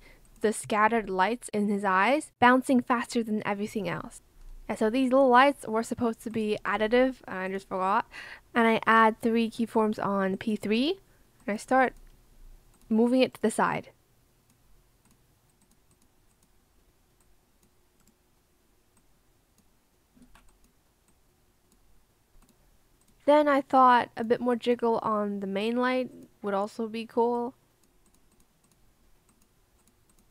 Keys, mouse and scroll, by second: 20.1 ctrl+z.